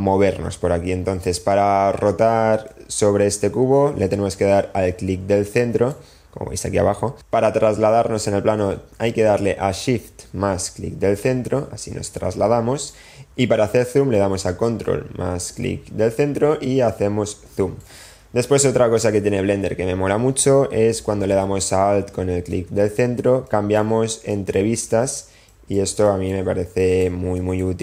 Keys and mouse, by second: 2.9-9.0 middle drag, 10.9-13.6 shift+middle drag, 15.4-18.5 ctrl+middle drag, 22.9-23.4 alt+middle drag, 24.1-24.4 alt+middle drag, 24.8 alt+middle drag, 25.4 alt+middle drag, 26.0 alt+middle drag, 26.8 alt+middle click, 27.4 alt+middle click.